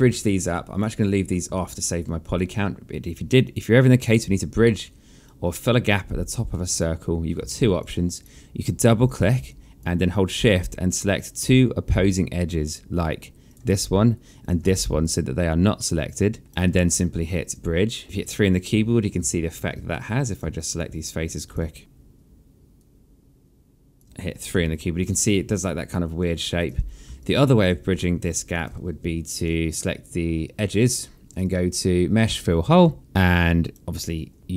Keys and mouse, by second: 0.1 alt+click, 3.0 click, 4.8 alt+click, 7.1 alt+click, 9.1 alt+click, 13.1 shift+click, 14.3 alt+middle click, 15.4 alt+right click, 17.1 click, 18.0 3, 18.9 alt+click, 19.3 1, 19.5 right click, 20.1 alt+click, 21.8 Tab, 22.4 click, 23.5 Tab, 24.1 3, 24.7 alt+click, 26.3 1, 26.8 alt+click, 27.3 ctrl+z, 28.5 Delete, 29.3 right click, 30.9 click, 33.5 click, 34.0 3.